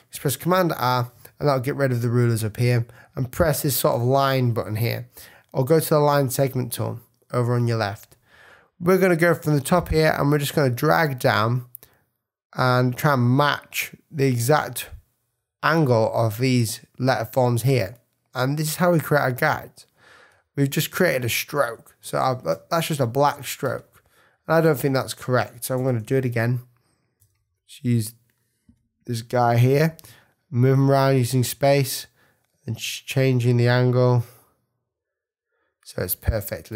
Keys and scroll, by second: 0.5 super+r, 3.9 \, 30.0 space, 36.2 v.